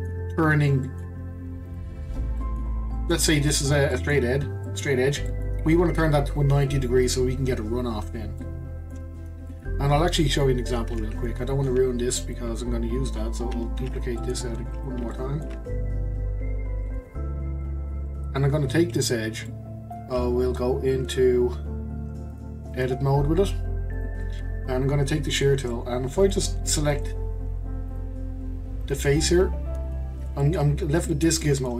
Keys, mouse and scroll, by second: 1.6 click, 2.4-8.3 middle drag, 8.4 middle click, 9.2-9.5 scroll down 4, 9.5-11.1 middle drag, 11.1 Tab, 12.3 click, 13.8 shift+d, 15.1-15.6 shift+middle drag, 15.6-16.7 scroll up 1, 16.7 scroll up 1, 16.8-17.3 middle drag, 17.3 click, 17.6-22.3 middle drag, 22.3 click, 22.7-25.7 drag, 25.7-26.9 middle drag, 26.9 click, 27.9-28.9 drag, 29.3-30.8 middle drag, 30.8 scroll up 1, 31.1-31.7 shift+middle drag.